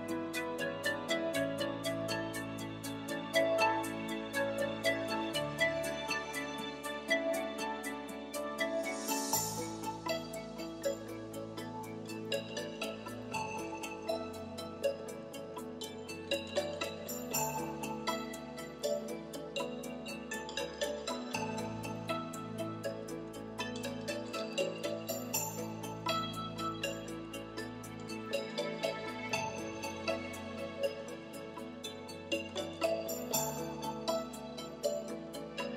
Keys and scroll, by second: 0.6 i, 0.9 7, 11.3 super+z.